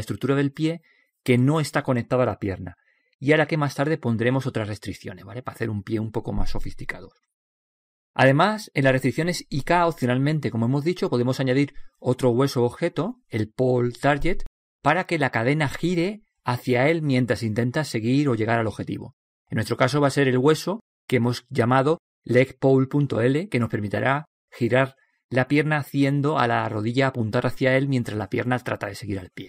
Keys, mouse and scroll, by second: 4.3-5.6 scroll up 1, 5.6-7.4 middle drag, 7.3-10.4 right drag, 11.9-13.8 middle drag, 18.2-20.6 middle drag, 21.4-21.7 scroll down 1, 21.7-23.6 middle drag, 23.6 scroll up 1.